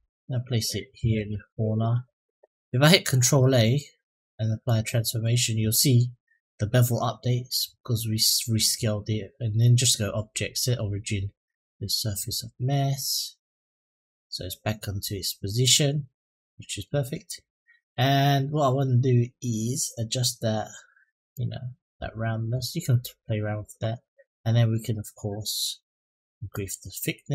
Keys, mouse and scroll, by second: 3.1 ctrl+a, 7.3-7.9 middle drag, 9.4-11.5 drag, 12.1-13.9 middle drag, 15.0 scroll up 1, 15.5-16.6 middle drag, 21.1-23.0 drag, 26.3-27.3 drag.